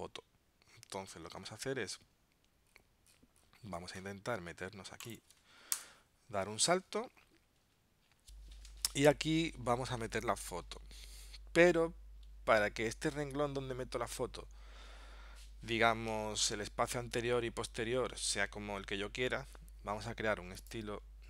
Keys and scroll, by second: 1.4 super+Tab.